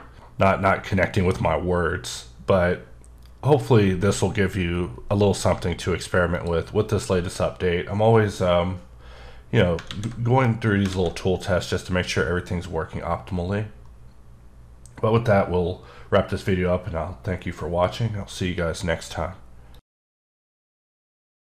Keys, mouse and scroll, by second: 0.5 scroll up 1, 1.1 scroll up 1, 1.7-2.9 scroll up 3, 2.9 scroll up 1, 3.5-5.0 scroll up 2, 5.0-5.5 scroll up 1, 5.5 scroll up 1, 6.3 click, 9.7 click, 9.8 a, 10.4 middle click, 10.9 alt+a.